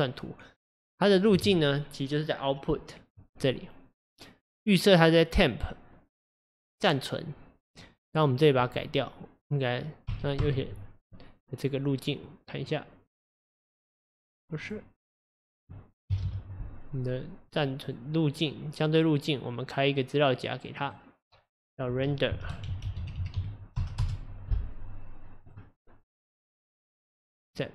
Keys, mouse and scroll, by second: 12.1 \, 12.8-17.5 drag, 17.5 KP_Divide, 18.0-24.0 drag, 26.5-27.7 drag.